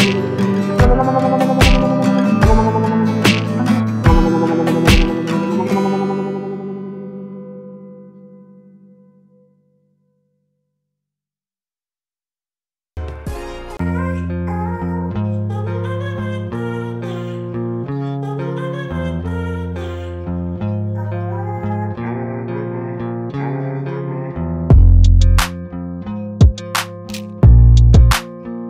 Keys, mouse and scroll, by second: 0.0 ctrl+z, 0.3 ctrl+z, 0.4 click, 0.7 Tab, 0.9 click, 1.2 shift+click, 1.3 shift+click, 1.6 shift+click, 1.8-2.2 shift+scroll down 1, 2.2 g, 3.4 click, 4.0 click, 5.3 ctrl+z, 5.6 click, 6.0 click, 6.3 shift+click, 6.4 shift+click, 6.6 shift+click, 6.8-7.2 scroll down 2, 7.2 ctrl+c, 7.4 ctrl+v, 8.7 ctrl+c, 8.9 g, 11.0-12.5 scroll down 2, 15.7-16.2 scroll down 2, 16.2-17.7 shift+middle drag, 18.3-19.9 scroll up 1, 20.2-20.7 shift+middle drag, 20.7-22.3 scroll down 2, 25.2-25.9 scroll up 1.